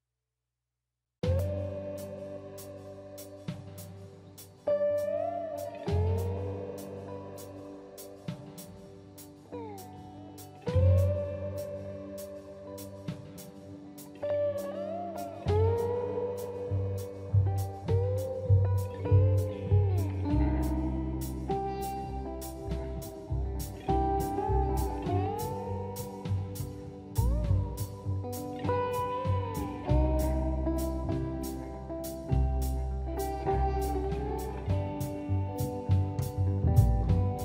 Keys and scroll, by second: 2.2 m, 4.0 space, 4.1 Escape, 4.4 space, 4.6 space, 31.1 Escape.